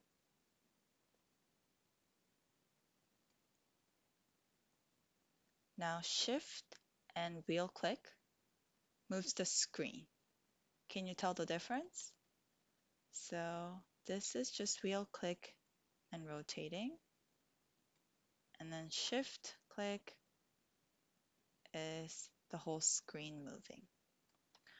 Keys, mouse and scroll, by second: 6.8-11.8 shift+middle drag, 13.6-18.0 middle drag, 19.5-24.3 shift+middle drag, 23.0-24.3 shift+drag, 23.0-24.3 shift+right drag.